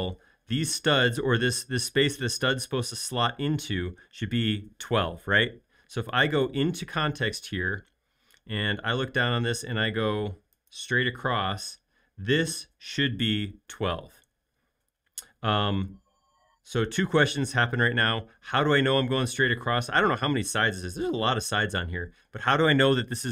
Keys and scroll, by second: 9.6 |.